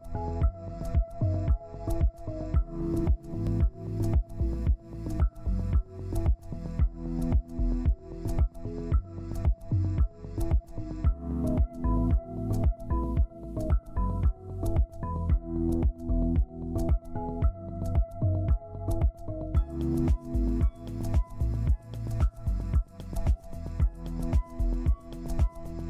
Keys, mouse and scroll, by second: 1.0 double click, 1.5 shift+click, 6.5 Right, 6.9 Right, 7.2 Left, 9.0 double click, 9.3 Down, 10.1 double click, 12.8 Up, 16.0 ctrl+alt+click, 20.6 ctrl+c, 21.3 ctrl+v, 22.7 ctrl+Page_Down.